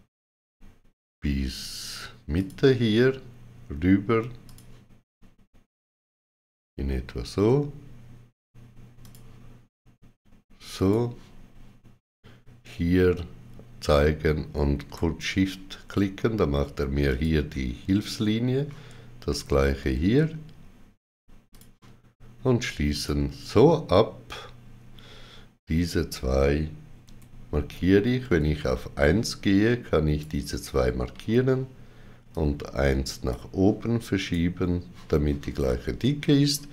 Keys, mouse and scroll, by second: 2.3 click, 8.9 click, 14.7 click, 16.9 click, 21.4 click, 26.9 2, 28.6-29.4 typing, 28.9 click, 31.0 g, 32.2 click, 34.1 right click.